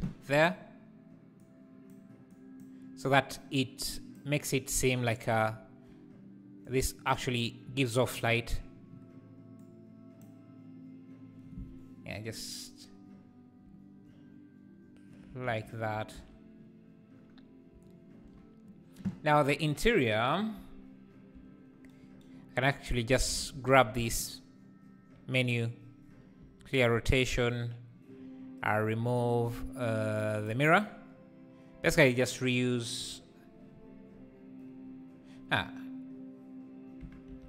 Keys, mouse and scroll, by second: 1.4 click, 6.7 click, 9.7-15.5 drag, 15.5 alt+a, 20.5 /, 23.4 click, 23.6 shift+d, 26.4 alt+r, 30.5 click, 37.0 Tab, 37.3 a.